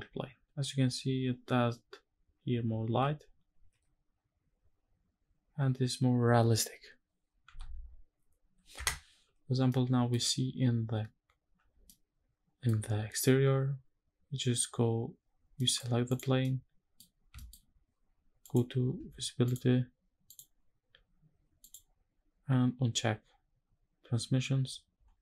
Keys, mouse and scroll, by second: 3.2 alt+h, 7.1 x, 9.3-9.8 middle drag, 9.9 scroll up 1, 11.5 shift+middle click, 15.3 middle click, 15.6 scroll down 1, 15.8 click, 16.3-16.7 middle drag, 16.8 scroll up 1, 17.2 shift+middle click, 17.4 scroll up 1, 18.1 click, 19.1 drag, 20.0 click, 20.4-21.3 scroll down 2, 21.3 click, 25.0 middle drag.